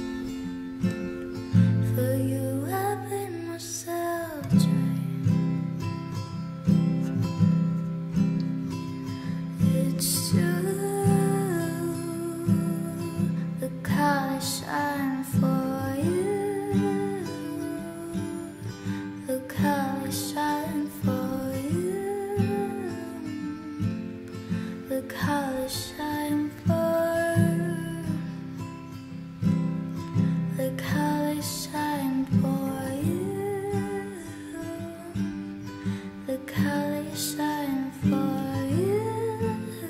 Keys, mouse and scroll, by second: 31.0 F9, 33.5 F9, 39.8 p.